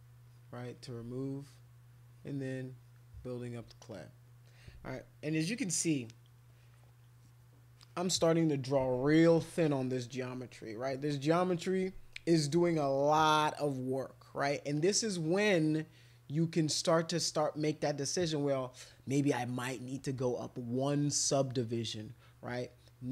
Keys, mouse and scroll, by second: 0.3 alt+click, 0.7 alt+click, 2.1 click, 2.4 click, 2.7 click, 3.9 click, 5.8 click, 6.5 click, 14.7-22.7 drag.